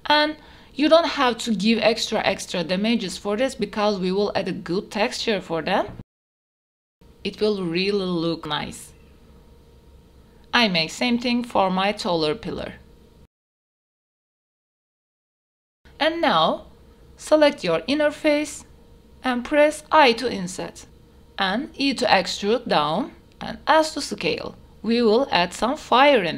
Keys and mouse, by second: 0.4 click, 1.0 click, 1.9 click, 2.4 g, 4.1 click, 4.1 y, 4.4 g, 4.7 x, 5.9 click, 6.4 Tab, 6.7 middle drag, 7.5 click, 8.1 Tab, 9.2 g, 9.6 x, 10.8 click, 10.9 Tab, 11.7-12.0 middle drag, 12.4 Tab, 12.5 shift+middle click, 12.6 ctrl+e, 13.2 ctrl+z, 13.3 ctrl+z, 13.5 shift+middle click, 13.5 Tab, 13.7 ctrl+r, 14.0 click, 14.2 3, 15.1 click, 16.7 shift+click, 17.1 s, 17.9 click, 18.7 ctrl+z, 19.5 i, 22.1 e, 24.1 s, 25.9 click, 26.2 Tab.